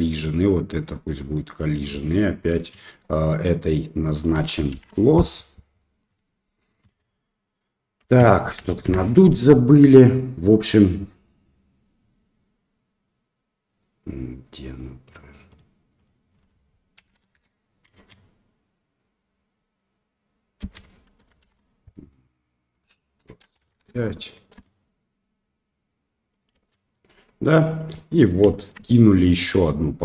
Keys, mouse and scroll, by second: 0.0 click, 1.9 space, 2.6 space, 2.9 click, 4.7 shift+Left, 6.8 space, 8.1 space, 8.9 shift+Left, 15.5 click, 16.0 click, 16.6 click, 18.0 space, 20.6 space, 21.5 shift+Left, 22.8-23.9 drag, 24.7 space, 26.7 space, 26.9-27.4 middle drag, 27.7 scroll down 1, 28.0-28.3 middle drag, 28.5 shift+middle click, 28.9 middle click, 29.5 click.